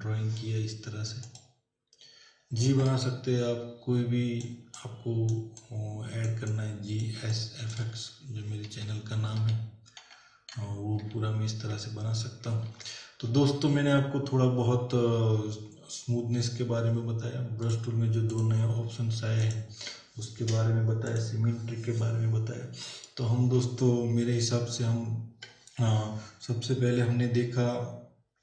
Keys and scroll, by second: 2.8 space, 8.7 ctrl+-, 12.6 ctrl+=.